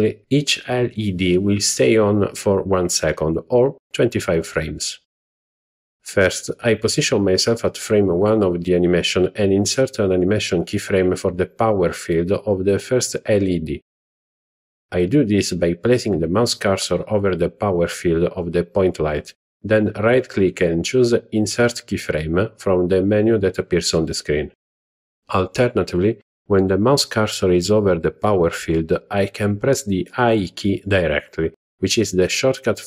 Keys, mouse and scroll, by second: 9.7 click, 10.5 click, 12.6-13.8 right drag, 16.5-20.9 right drag, 27.6 i, 30.1 i.